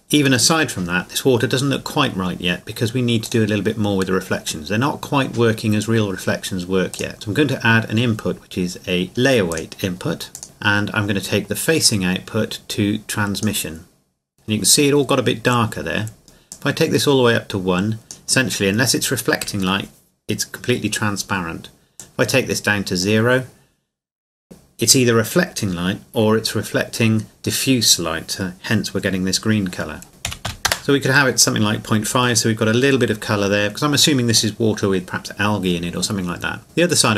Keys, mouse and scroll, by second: 2.1 scroll up 1, 3.2-5.5 drag, 6.9-8.4 drag, 9.5 click, 10.4 shift+middle click, 11.9 click, 16.5 click, 22.0 click, 30.1 click, 30.3 KP_Decimal, 30.5 KP_5, 30.7 KP_Enter, 34.5 middle click.